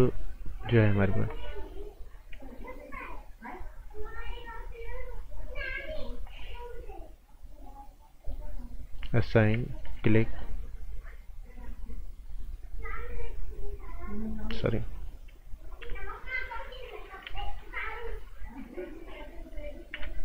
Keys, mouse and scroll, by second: 3.1 right click, 3.9 click, 9.1 right click, 9.8 alt+right click, 15.8 v, 17.0-17.7 typing, 17.4 click, 19.9 t.